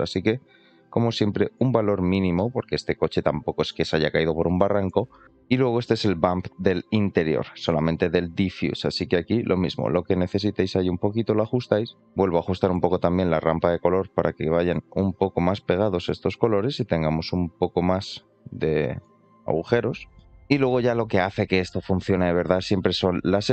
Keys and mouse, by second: 2.5-3.6 middle drag, 5.2 shift+middle click, 5.2-10.4 drag, 11.3-11.7 shift+middle drag, 12.0 shift+middle click, 12.8 shift+middle click, 14.1-14.8 drag, 15.3-19.0 drag, 20.0 shift+middle click, 20.6 shift+middle drag, 21.4 middle click, 22.8-23.5 shift+drag.